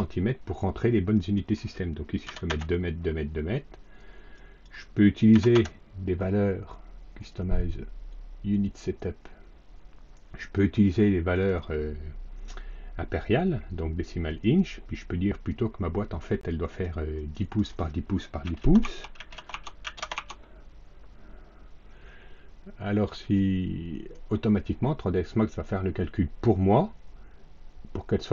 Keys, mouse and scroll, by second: 1.0 click, 2.2 KP_2, 2.4 KP_Enter, 4.2 click, 5.2 KP_2, 5.4 KP_Enter, 7.1 click, 8.4 click, 10.3 click, 11.2 click, 14.3 click, 15.2 click, 16.6 click, 17.0 click, 17.3 click, 18.3-19.8 typing, 18.7 Tab, 19.4 Tab, 20.0 Tab, 23.0 click.